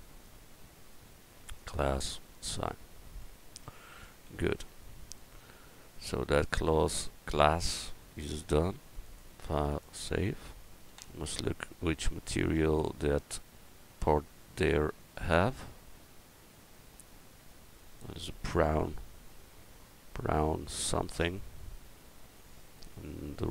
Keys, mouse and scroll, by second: 3.3 click, 3.6 Tab, 4.3 a, 10.9 KP_1.